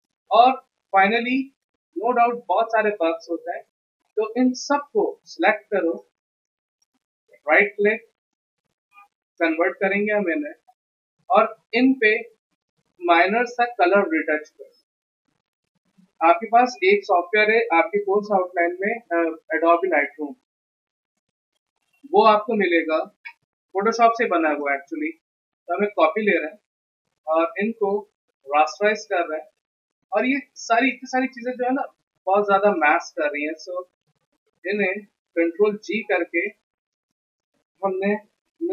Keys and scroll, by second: 0.4 z, 31.9 ctrl+g, 35.4 ctrl+g, 38.0-38.7 typing.